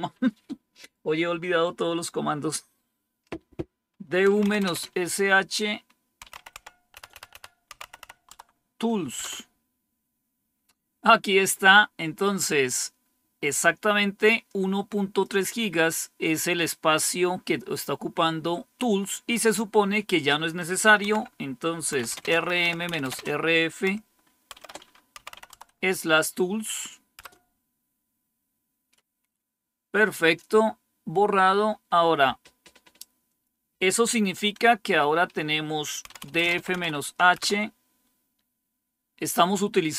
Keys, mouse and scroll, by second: 3.9-4.9 typing, 5.9-8.4 typing, 9.1 Return, 14.4-18.7 drag, 19.2 click, 20.9-25.8 typing, 27.1 Return, 30.7-32.5 scroll down 1, 33.2-34.2 drag, 35.7-37.4 typing.